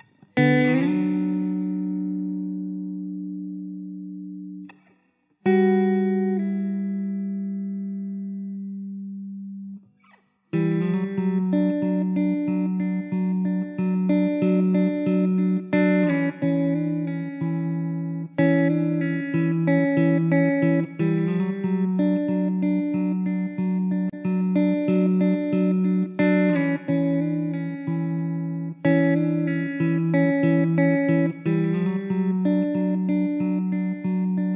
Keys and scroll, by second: 3.2 ctrl+r, 5.8 ctrl+z, 5.9 ctrl+z, 6.4 ctrl+r, 7.7 alt+z, 9.5 Tab, 9.7 alt+z, 11.2 Tab, 11.7 Tab, 12.3 alt+z, 14.0 Tab, 14.2 alt+z, 15.0 Tab, 15.4 Tab, 16.2 ctrl+r, 17.6 alt+z, 18.3 ctrl+z, 21.2 alt+z, 21.4 Tab, 21.9 `, 23.4 Tab, 25.9 ctrl+r, 26.8 alt+z, 28.8 alt+z, 29.2 `, 30.1 alt+z, 31.5 Tab, 31.7 alt+z, 32.0 `, 33.7 Tab, 34.4 s.